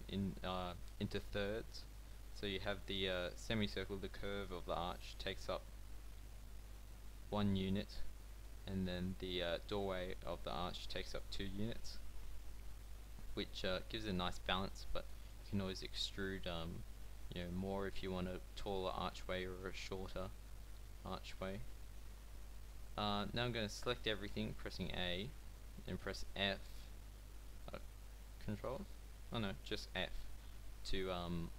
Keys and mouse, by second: 12.6-14.1 drag, 15.0 b, 16.4-18.5 drag, 16.7 g, 23.3 a, 23.5 a, 26.0 f, 27.6 ctrl+f, 28.6 ctrl+f, 29.1 f.